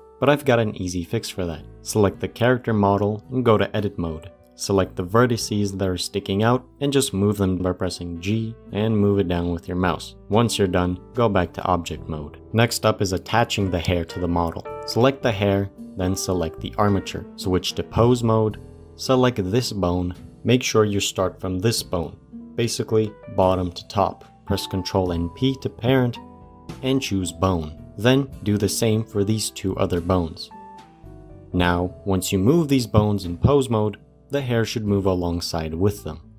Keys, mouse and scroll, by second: 3.3 Tab, 4.2 middle click, 4.5-5.0 scroll up 3, 5.0 click, 5.6-6.8 middle drag, 6.8 g, 9.5 middle click, 10.1 g, 11.3 Tab, 11.6 click, 11.9 middle click, 12.3 click, 15.3 click, 17.1 shift+click, 17.4 ctrl+Tab, 18.6 click, 24.9 ctrl+p, 28.4 click, 29.0 ctrl+p, 30.1 click, 30.6 ctrl+p, 31.3-31.7 middle drag, 31.7 r, 33.3 click, 33.6 r, 34.9 click, 35.2 r.